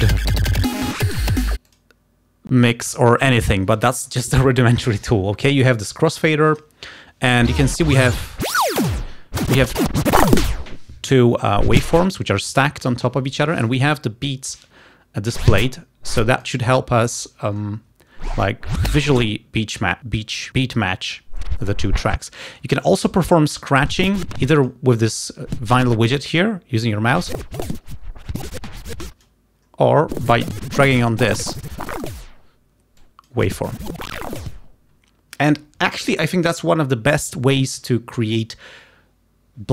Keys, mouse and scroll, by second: 1.7 click, 2.7 click, 5.8-7.0 drag, 7.6-8.9 drag, 9.4-10.5 drag, 11.7 click, 15.4-16.7 drag, 18.4-19.4 drag, 21.4-22.5 drag, 23.9-24.9 drag, 25.6-29.5 drag, 30.2-32.3 drag, 33.0-34.5 drag.